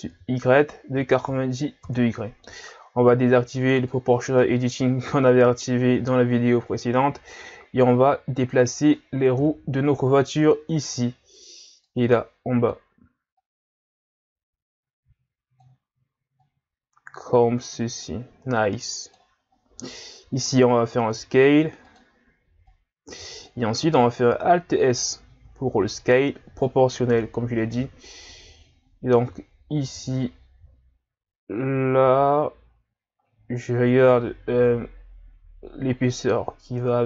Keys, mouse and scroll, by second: 3.8 click, 4.4-5.4 middle drag, 5.4-6.7 scroll down 2, 6.7-7.3 scroll down 1, 7.3 click, 9.4 KP_3, 10.2-10.8 scroll down 5, 10.8-11.9 scroll up 2, 11.9-16.4 drag, 16.4 click, 19.5-20.5 scroll up 2, 20.5 s, 22.7 click, 24.3 alt+s.